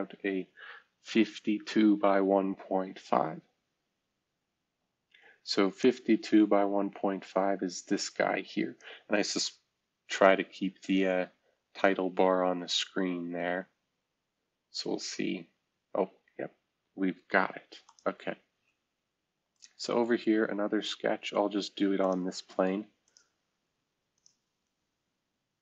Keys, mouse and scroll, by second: 0.0-1.6 scroll down 2, 2.5-4.4 scroll down 3, 13.0 scroll up 2, 16.8 scroll down 2, 17.3-18.4 scroll up 2, 20.6-21.0 scroll down 3.